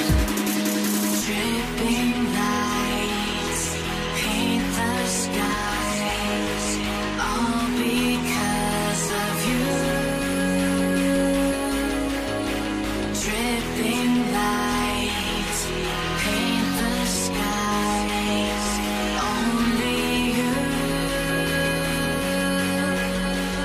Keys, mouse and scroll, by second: 0.0-0.7 typing, 7.5 ctrl+ف, 8.0 alt+scroll down 4, 9.2 alt+click, 10.8 alt+scroll up 7, 15.1 alt+scroll down 1, 15.7 Return, 16.7 Return, 19.6 alt+scroll down 1, 19.9 space, 20.8 space, 21.0 ctrl+a, 22.0 ctrl+click, 23.3 ctrl+click.